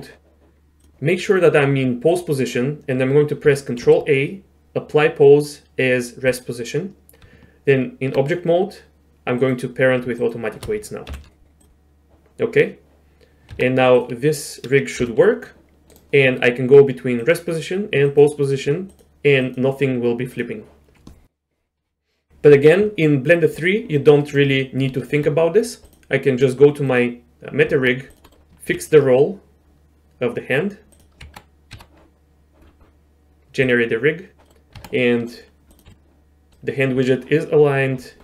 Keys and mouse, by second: 2.1 click, 4.0 ctrl+a, 7.2 Tab, 10.2 shift+click, 11.1 ctrl+p, 13.5 Tab, 14.0 click, 15.0 g, 17.2 click, 18.1 click, 18.9-19.5 drag, 20.3-23.0 drag, 24.2 middle click, 25.0 shift+middle drag, 25.9 middle click, 26.4 click, 27.7 Tab, 28.3 middle click, 28.7 ctrl+z, 28.7 ctrl+r, 31.2 Tab, 31.7 Tab, 33.6 click, 34.4 middle drag, 34.8 Tab, 35.2 middle click, 35.7 click, 36.3 g.